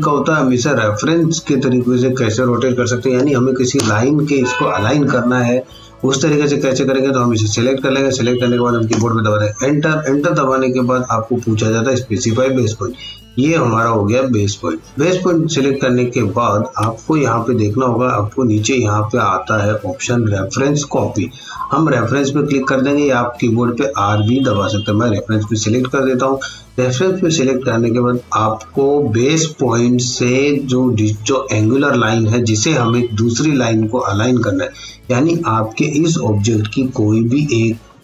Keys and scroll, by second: 2.8 r, 3.2 o, 3.8 Return, 8.9 Return, 17.3 F8.